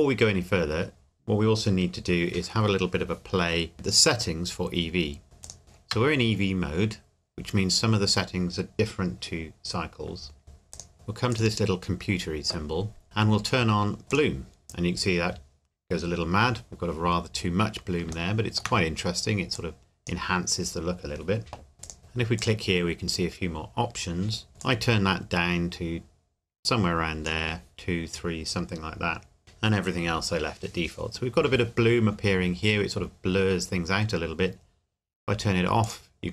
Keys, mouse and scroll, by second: 3.7 click, 5.4 click, 10.7 click, 11.4 click, 14.1 click, 18.1 shift+Num_Lock, 18.1 click, 18.3 shift+middle click, 19.5 click, 21.8 click, 24.6 click, 35.8 click.